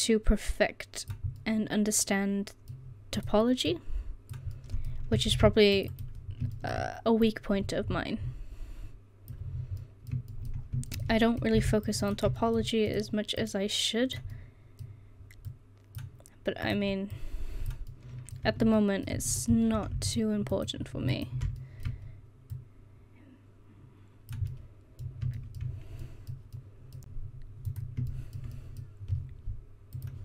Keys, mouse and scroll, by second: 1.6 middle click, 4.6 middle click, 5.4 ctrl+r, 9.6 middle click, 11.6 ctrl+r, 12.9 right click, 13.5-14.5 middle drag, 17.9 middle click, 18.5 Tab, 19.2 Tab, 21.7 middle click, 22.2 middle click, 24.7 middle click, 26.0 middle click, 27.7 right click, 28.6-30.0 middle drag.